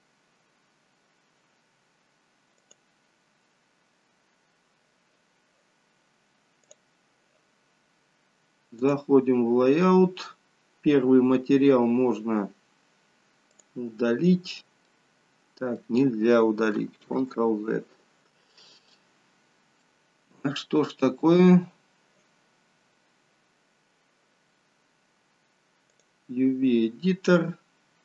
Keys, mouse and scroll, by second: 9.1 click, 13.6 click, 14.9 middle click, 17.4 ctrl+z, 19.0 middle click.